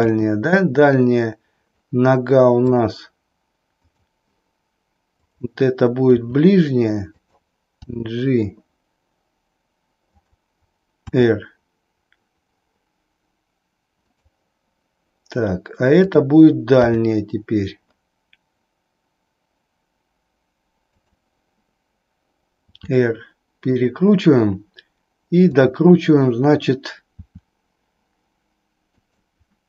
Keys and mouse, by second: 0.0 KP_3, 2.7 click, 3.9 click, 5.2-6.2 drag, 6.3 r, 7.9 g, 11.0 r, 14.1 click, 17.2 g, 22.7 r, 27.2 r, 29.0 click.